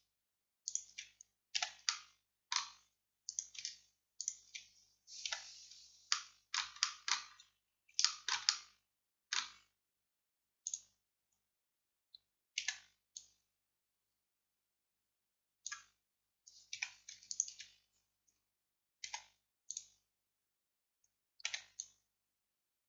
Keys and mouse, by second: 1.6 click, 1.6 f, 5.3 f, 5.7 middle click, 6.3 middle click, 9.1 middle click, 12.7 c, 17.4-21.5 right drag, 19.2 x, 21.5 c.